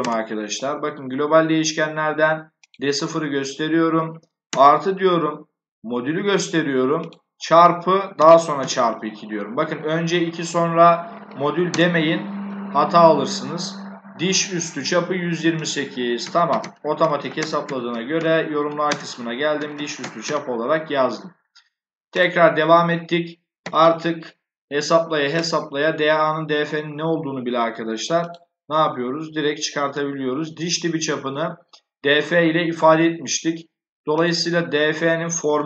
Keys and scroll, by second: 8.1 *, 8.5 2, 11.6 Return, 16.1-20.6 typing, 23.3-24.2 typing.